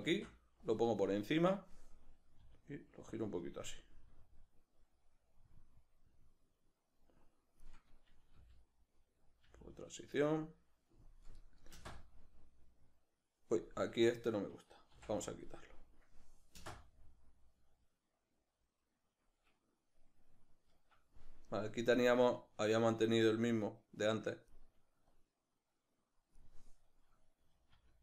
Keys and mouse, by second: 0.0 shift+d, 1.1-3.2 drag, 2.4 r, 3.8-9.0 drag, 8.4 g, 9.4 g, 10.5-14.3 drag, 11.8 space, 13.9 Escape, 14.3 right click, 15.0 x, 20.8 Escape, 21.4 right click, 22.0-28.0 drag, 27.8 r.